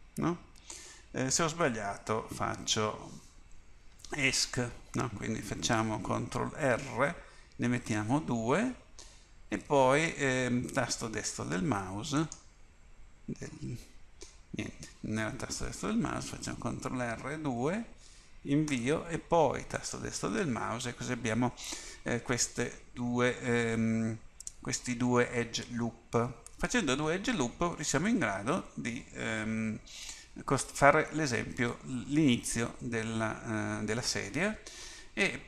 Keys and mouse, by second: 6.6 ctrl+r, 12.4-15.3 right drag, 16.2 ctrl+r.